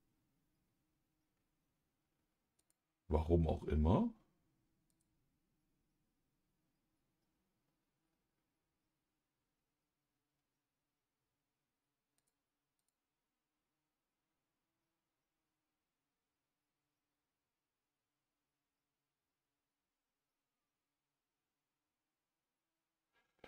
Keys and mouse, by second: 2.5 click, 4.9-6.9 drag, 12.1 click, 12.7-23.4 drag.